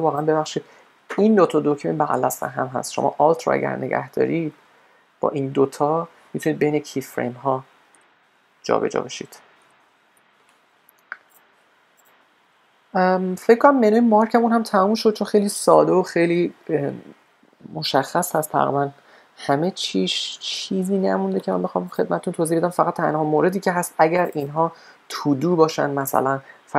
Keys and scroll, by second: 8.0 alt+', 8.7 alt+;, 9.1 alt+;.